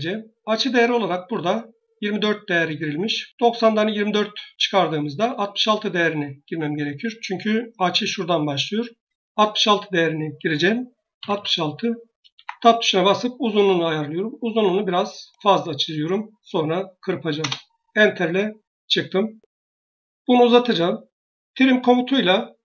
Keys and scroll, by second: 11.0 typing, 12.2 Tab, 17.2 Return.